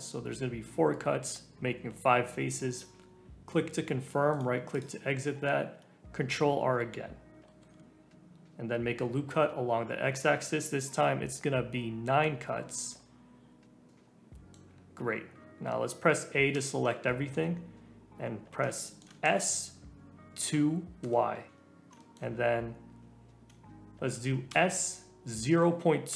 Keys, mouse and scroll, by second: 4.7 click, 5.1-5.4 scroll up 1, 5.4-6.7 scroll down 1, 6.7-7.5 scroll down 1, 7.5 ctrl+r, 13.9 middle click, 14.6 scroll down 2, 16.5 a, 17.0-19.2 shift+middle drag, 19.2 s, 21.5 shift+middle click, 21.6-22.0 scroll up 1, 22.0-24.5 shift+middle drag, 24.5 s.